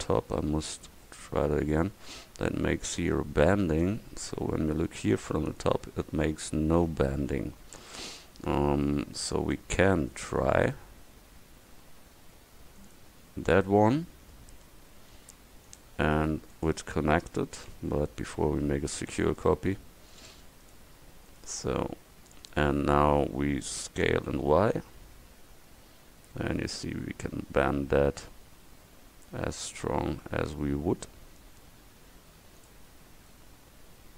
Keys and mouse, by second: 0.5 KP_1, 4.5 KP_7, 6.8 Tab, 17.8 Tab, 19.2 shift+d, 21.8 Tab, 24.1 s, 33.0 Tab.